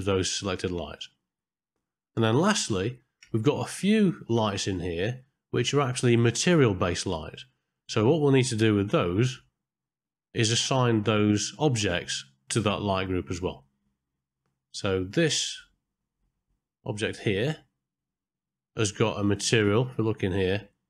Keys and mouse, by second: 0.3 click, 2.0-3.1 ctrl+middle drag, 3.4 shift+middle click, 5.1 middle click, 15.3 middle click, 17.4 click, 20.2 middle click.